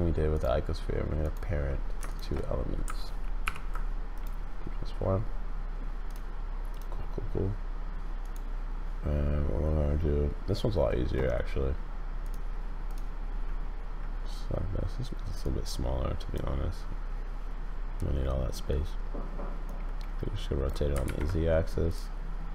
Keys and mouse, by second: 1.2 click, 2.1 shift+click, 3.4 ctrl+p, 6.0 click, 6.7 click, 12.9 click, 15.4 click, 19.7-20.8 drag, 21.0 ctrl+z, 21.9-22.5 drag.